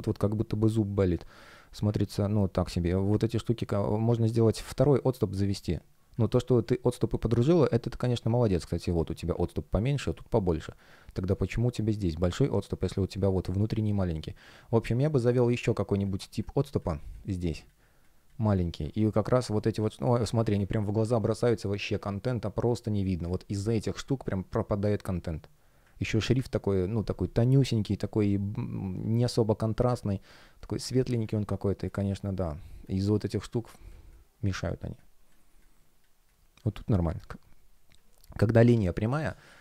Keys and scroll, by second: 2.5 space, 4.5 space, 10.4 space, 13.5 space, 22.1 space, 31.2 space, 39.0 space.